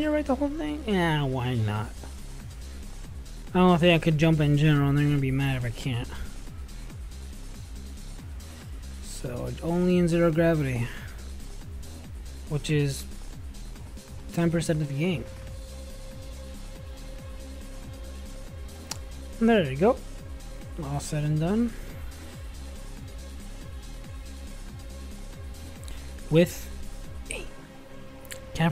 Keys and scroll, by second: 21.9 /, 25.0 ctrl+b, 25.1 ctrl+n, 25.3 ctrl+b, 25.8 ctrl+v.